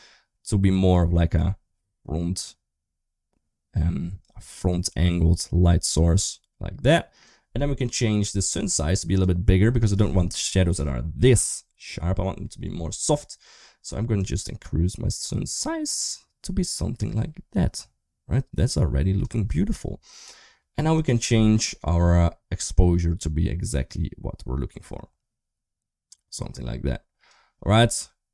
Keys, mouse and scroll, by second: 8.7-10.0 drag, 14.0-19.0 drag, 22.5-27.1 drag.